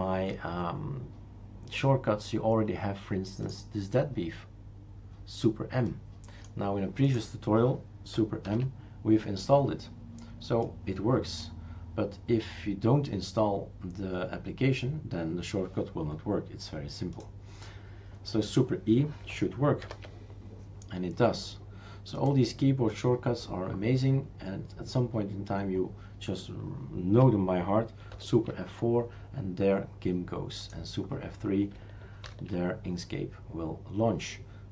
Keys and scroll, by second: 8.5 super+m, 19.8 super+e, 28.1 super+F4, 32.3 super+F3.